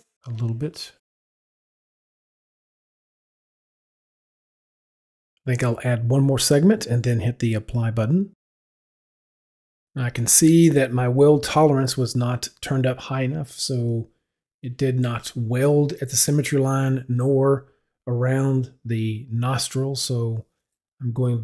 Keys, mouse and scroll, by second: 1.9 click, 3.4 click, 5.9 click, 9.0 click, 11.9 right click, 12.9 right click, 14.2 right click, 14.9 right click, 17.1 right click, 19.4 right click, 21.2 right click.